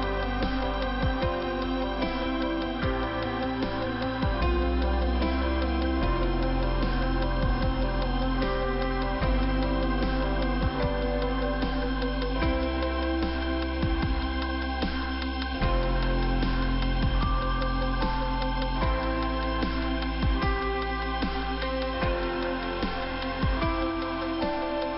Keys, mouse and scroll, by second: 0.7 click, 3.7 middle click, 4.6-4.9 scroll up 1, 4.9 middle click, 5.8 click, 8.5 click, 10.9 click, 12.7 middle click, 14.7 scroll down 2, 16.8 middle click, 17.5 scroll down 1, 19.7 click, 19.7 click.